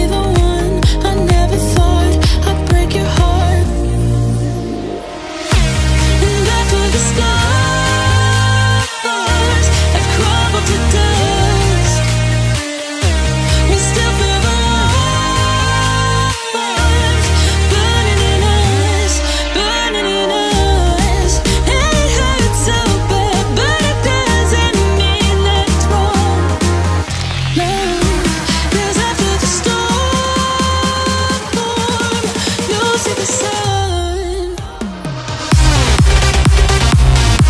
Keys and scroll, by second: 7.4 ctrl+c, 8.3 Right, 8.7 Return, 9.8 ctrl+v, 11.0 Return, 11.4 ctrl+v, 23.2 BackSpace, 32.3 shift+y, 32.9 o, 37.3-37.4 typing.